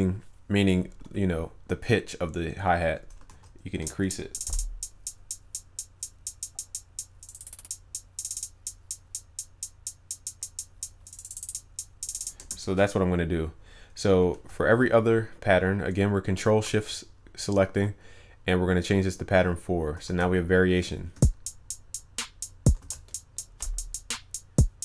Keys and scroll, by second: 3.3 ctrl+s, 20.1 ctrl+s.